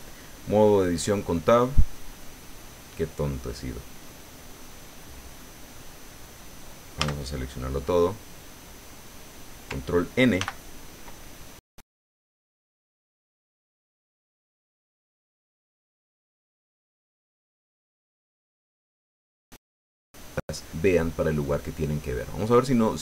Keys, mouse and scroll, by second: 7.3 a, 10.4 ctrl+n.